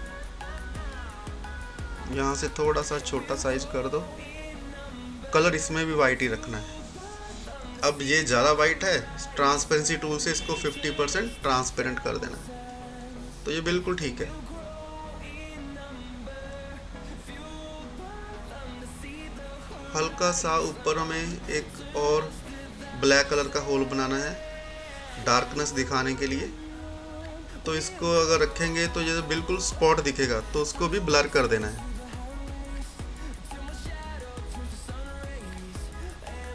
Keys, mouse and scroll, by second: 1.0 scroll down 1, 2.4-5.7 drag, 8.5-14.5 drag, 16.0 right click, 16.7 click, 17.6 scroll down 1, 20.4-30.4 drag, 34.0-36.5 drag.